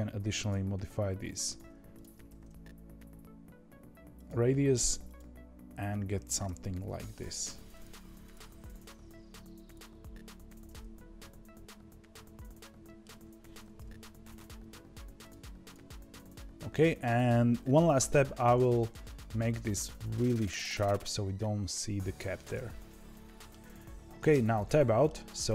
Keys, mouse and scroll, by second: 0.2 alt+s, 1.9 click, 2.2 alt+s, 5.0 click, 6.4 g, 8.2 click, 8.4 g, 10.7-13.7 middle drag, 13.7 KP_1, 14.5 g, 15.6 click, 15.8 g, 18.3 alt+s, 23.0-24.2 shift+middle drag, 24.2 Tab, 24.6-25.0 middle drag, 25.0-25.4 scroll down 1, 25.4-25.5 shift+middle drag.